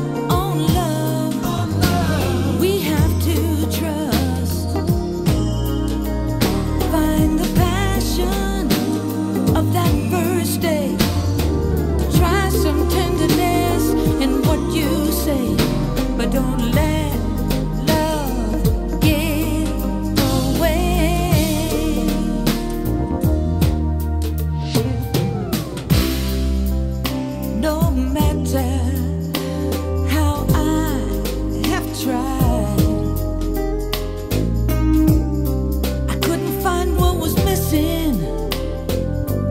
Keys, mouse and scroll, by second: 3.9-4.6 scroll down 7, 4.6-6.6 scroll up 14, 6.6 scroll down 1, 6.7-7.1 scroll, 7.2 t, 7.6-8.3 scroll, 8.4 click, 8.7 scroll, 8.7-10.0 scroll up 5, 10.0-11.2 scroll down 2, 11.2 h, 12.7-16.6 drag, 16.6-17.6 right drag, 17.6-23.8 drag, 23.8-25.4 middle drag, 23.8 scroll, 25.4 click, 25.8-27.4 middle drag, 25.8 scroll, 27.4-39.5 drag.